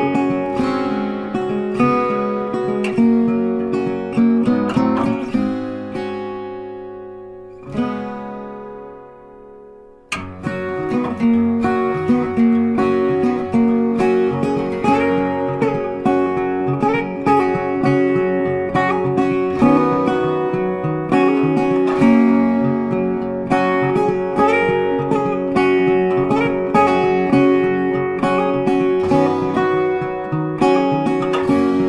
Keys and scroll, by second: 9.2 ctrl+t, 19.2 ctrl+t.